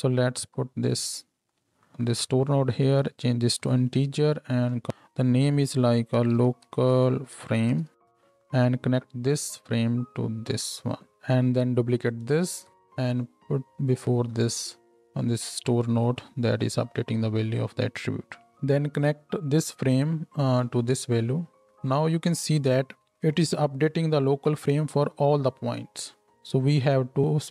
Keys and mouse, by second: 0.4 shift+d, 3.0-12.2 middle drag, 12.2-15.0 shift+drag, 12.5 shift+d, 15.0-27.5 middle drag.